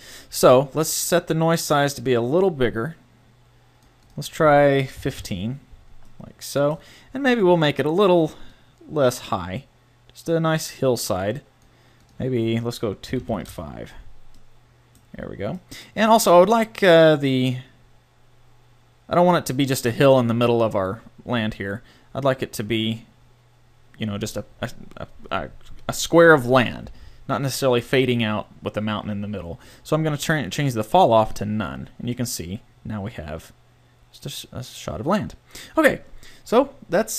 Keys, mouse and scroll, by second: 1.0-2.8 drag, 4.0-6.0 drag, 7.8 middle click, 8.5-10.4 drag, 10.4-12.0 middle drag, 12.0-13.9 drag, 13.9 middle click, 14.8-16.7 middle drag, 16.9 click, 30.6-32.0 drag, 32.4-34.2 middle drag.